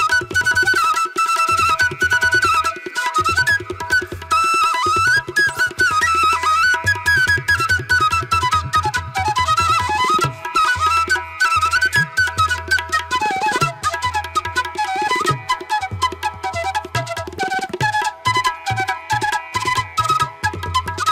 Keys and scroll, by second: 5.3 space, 6.3 ctrl+alt+z, 18.9 space.